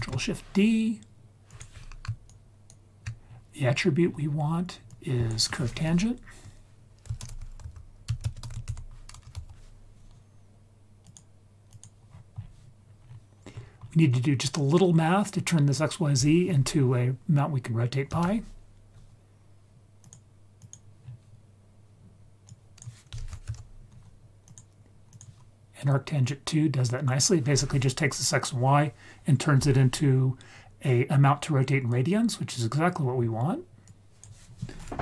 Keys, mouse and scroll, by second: 1.5 click, 2.1 scroll down 2, 2.3 ctrl+right click, 3.2-3.6 scroll down 2, 3.5-4.8 scroll up 6, 4.8-11.1 drag, 11.7 click, 12.0-12.8 scroll down 4, 12.8 scroll up 2, 12.9 scroll down 1, 13.0-14.5 scroll up 4, 14.5 scroll up 1, 14.7-20.1 drag, 20.6 click, 21.0-22.4 scroll down 2, 22.4-24.5 drag, 25.1 click, 26.2-27.2 drag, 27.9-28.4 scroll up 3, 30.3-31.2 scroll down 4, 31.8-32.5 drag, 32.9-33.6 scroll up 2, 33.8-35.0 drag.